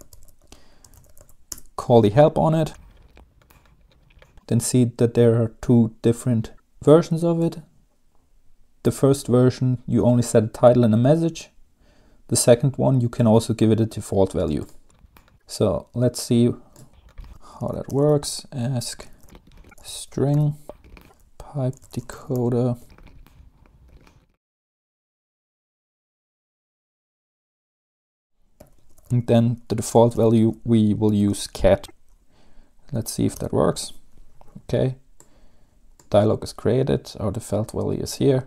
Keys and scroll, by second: 0.0-1.8 typing, 17.5-27.8 typing, 28.1 Tab, 29.2-31.9 typing, 33.4 Return.